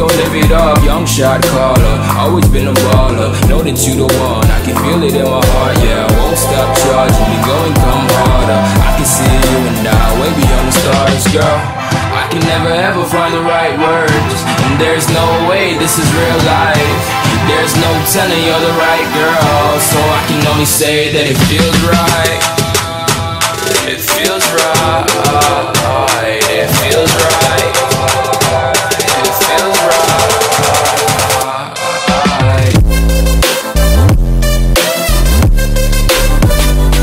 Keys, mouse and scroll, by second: 1.1 F11, 1.1 F10, 1.6 click, 2.5-4.9 typing, 5.6-7.4 drag, 7.5 F10, 8.1 click, 8.8 right click, 10.0 click, 10.1 F10, 10.6-12.5 drag, 12.9-14.7 typing, 14.9 Return, 16.2-17.5 drag, 20.0 right click, 20.0 F10, 20.9 click, 22.2-24.0 typing, 24.9-31.6 drag, 32.0 ctrl+c, 32.3 ctrl+v, 32.8-34.7 drag, 34.7 F10, 35.8 click.